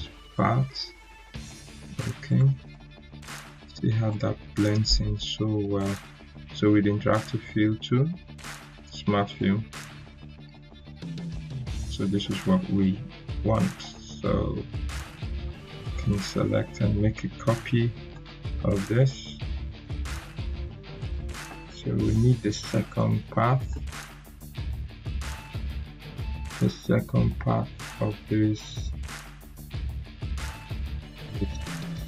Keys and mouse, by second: 3.4 right click, 5.7 click, 13.4 click, 13.7 right click, 14.9-16.0 drag, 18.0 right click, 18.9-19.5 drag, 30.7 click.